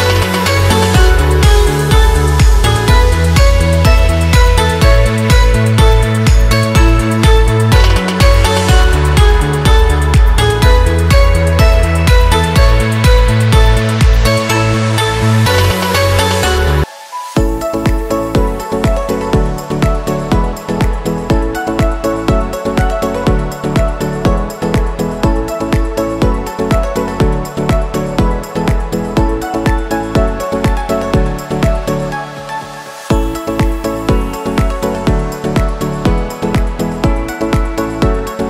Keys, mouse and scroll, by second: 1.2 Return, 2.7 click, 3.4 shift+click, 4.2 shift+click, 4.9 ctrl+t, 6.2 click, 6.9 Return, 7.7-14.7 drag, 15.7 shift+click, 16.4 ctrl+t, 17.5 click, 18.5 Return, 19.7 Left, 20.2 Up, 20.8 Left, 21.8 scroll down 1, 23.1 scroll up 1, 24.2 click, 28.0 shift+F12, 29.1 scroll up 1, 30.1 scroll up 1, 32.5 click, 32.7 Up, 34.0 scroll down 1, 36.1-37.2 scroll up 2, 37.2 click.